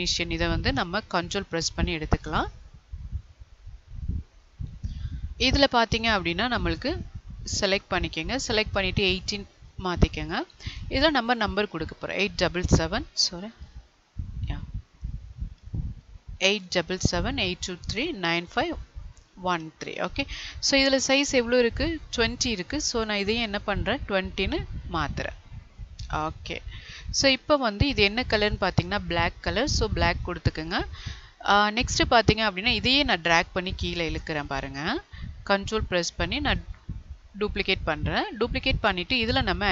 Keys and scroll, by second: 4.5 Delete, 15.8 ctrl+a, 23.2 ctrl+a.